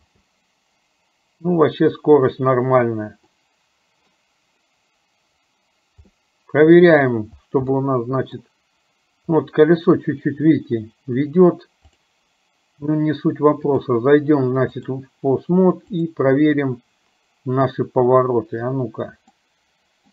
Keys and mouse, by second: 0.1 space, 3.6-4.6 middle drag, 6.3 middle click, 7.9 middle click, 13.9-15.3 drag, 16.2 click, 19.7 middle click.